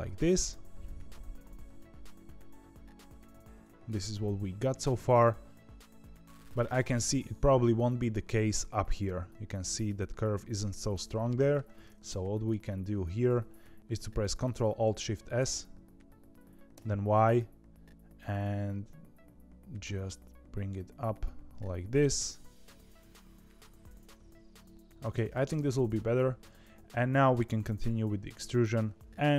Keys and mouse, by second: 1.7-5.1 middle drag, 11.1 middle click, 12.0 KP_3, 15.0 ctrl+alt+shift+s, 22.2 g, 24.7 middle click, 25.5 KP_1.